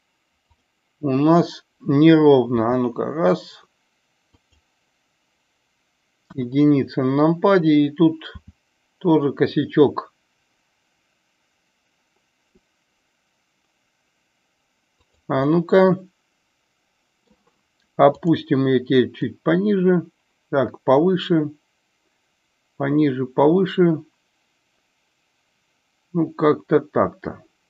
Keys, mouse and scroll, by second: 0.3 click, 4.3 click, 4.3 r, 6.1 KP_1, 8.2 r, 15.0 click, 15.3-17.2 middle drag, 18.1 click, 19.3-27.6 drag.